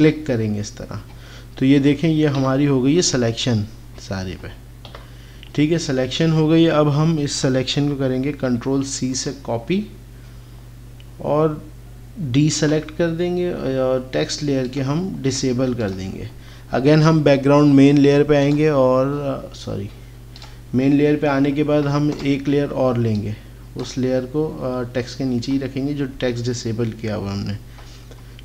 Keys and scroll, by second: 4.9 KP_8, 8.5 ctrl+c, 12.6 ctrl+d.